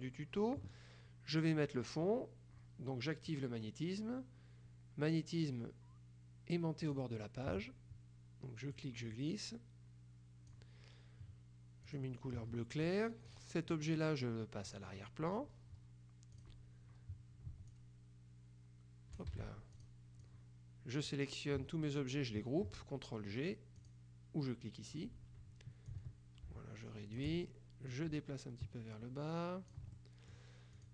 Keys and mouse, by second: 0.0 click, 6.9 click, 8.9-11.1 drag, 11.9 click, 13.4 click, 14.8 click, 16.5 click, 17.8-19.7 ctrl+shift+drag, 19.4 ctrl+shift+z, 19.9 ctrl+shift+click, 23.9 click, 25.9-27.7 drag, 28.0-30.3 ctrl+drag, 30.0 ctrl+right click, 30.8 ctrl+click.